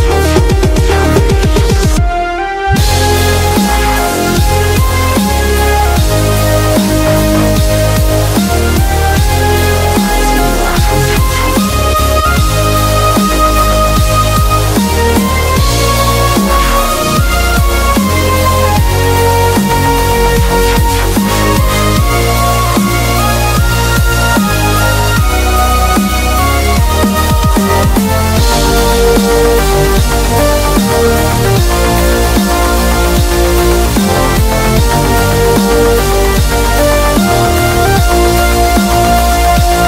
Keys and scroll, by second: 11.8 super+-, 12.2 super+-, 12.4 super+-, 12.7 super+-, 13.1 super+-, 15.4 super+=, 31.8 ctrl+Tab, 32.8 super+a, 33.1 super+c, 33.8 ctrl+Tab, 34.4 ctrl+Tab, 35.5 super+v, 37.0 shift+super+}, 37.8 super+t, 39.2 Return.